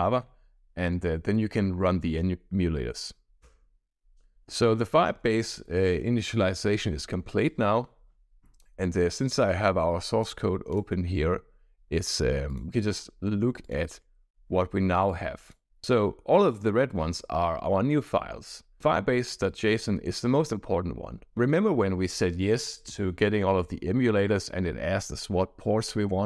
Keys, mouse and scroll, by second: 10.6 click, 12.4 drag, 13.6 click, 15.0 click, 18.8 click, 21.7-23.3 scroll down 7, 23.4-24.5 scroll down 2.